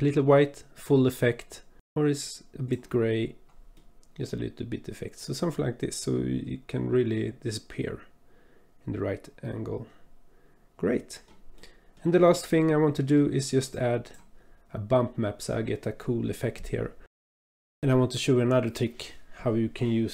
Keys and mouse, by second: 3.9-11.2 drag, 11.6 click, 12.7 click, 12.8 middle click, 13.8 click, 17.0 middle click.